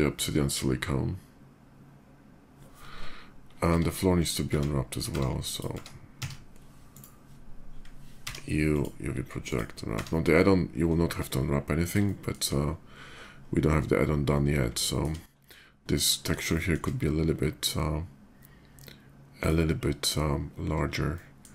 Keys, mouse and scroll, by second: 3.5 Tab, 3.9 click, 4.7 a, 4.9 Tab, 5.3 click, 6.2 a, 6.7 right click, 7.9 u, 8.4 click, 9.0 click, 9.7 Tab, 11.3 middle click, 11.8 shift+middle drag, 14.0-14.8 shift+middle drag, 16.3 shift+middle click, 19.1 shift+click, 20.9 shift+middle click.